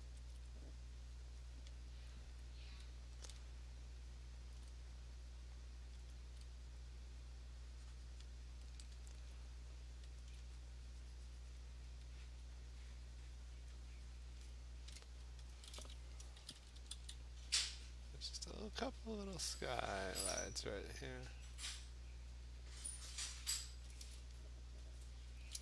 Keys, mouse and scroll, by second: 0.3 alt+click, 1.7 click, 2.1 click, 2.4 click, 4.5 alt+click, 6.1 alt+click, 8.2 click, 10.2 alt+click, 10.7 click, 11.6 click, 11.8 alt+click, 13.7 click, 14.2 click, 14.5 click, 14.8 alt+click, 15.5 alt+click, 15.6 alt+click, 16.4 [, 16.6 [, 16.8 [, 17.0 [, 18.6 click, 19.0 click, 19.8 click, 20.5 alt+click, 21.5 click, 23.3 click, 23.9 click, 24.0 click, 25.4 click.